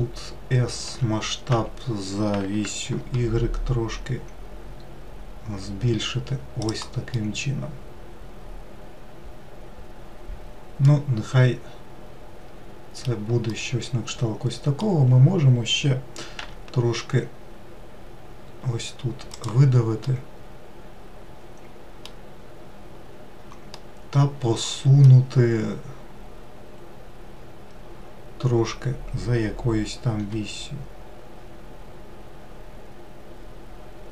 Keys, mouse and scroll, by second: 0.4 s, 6.7-9.8 middle drag, 13.1-15.9 middle drag, 15.9 e, 19.6-22.7 middle drag, 23.3-25.4 middle drag, 25.4-25.9 scroll down 1, 29.8 g.